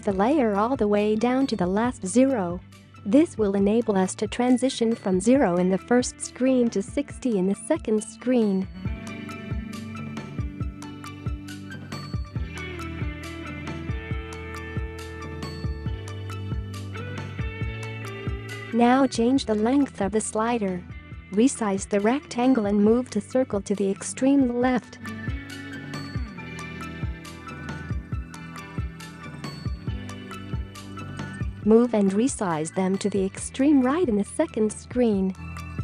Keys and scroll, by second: 0.2 ctrl+z, 15.3 Up, 16.8 space, 18.9 space, 29.0-30.2 space.